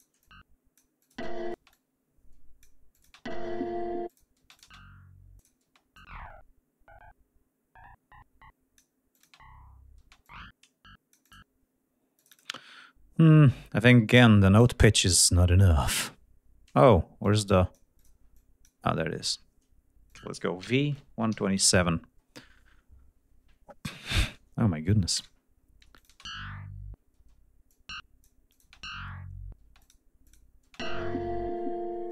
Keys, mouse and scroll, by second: 0.2 click, 1.0 click, 1.2 space, 1.7 click, 3.0 click, 3.1 space, 4.1 click, 4.4 space, 4.5 click, 5.4 click, 5.7 space, 6.0-9.0 drag, 9.2 click, 9.3 space, 10.1 space, 10.3-11.5 drag, 12.2-14.2 drag, 17.2 click, 18.0 click, 18.4 click, 19.2 click, 20.1 click, 20.6 v, 25.2 Return, 26.5 space, 27.2 space, 27.7 click, 28.5 click, 28.7 space, 29.7 space, 29.8 click, 30.3 click, 30.7 space.